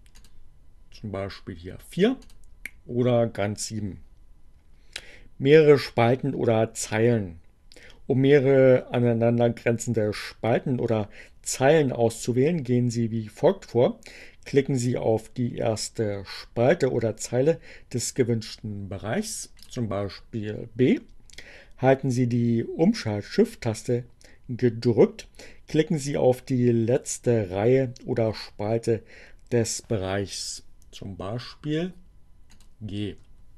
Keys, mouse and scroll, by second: 2.2 click, 18.1 click, 32.4 shift+click.